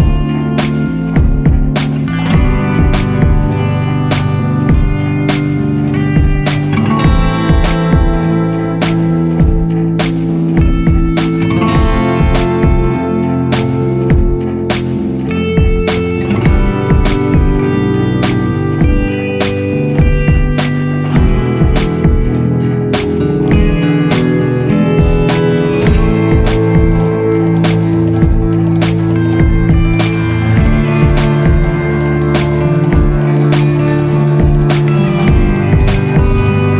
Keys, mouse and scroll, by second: 13.7 ctrl+z, 13.8 ctrl+z, 14.0 ctrl+z, 15.9 ctrl+0, 20.3 ctrl+g.